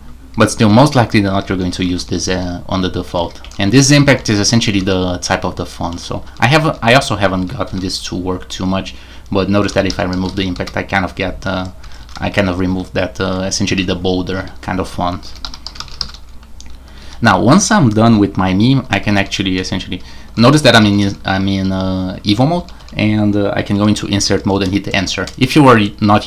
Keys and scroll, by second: 0.0-4.1 typing, 0.5 Escape, 5.7-6.4 typing, 6.4 Escape, 7.4-8.2 typing, 9.4-13.7 typing, 15.0-17.0 typing, 19.1 typing, 20.5-22.8 typing, 23.9-24.7 typing.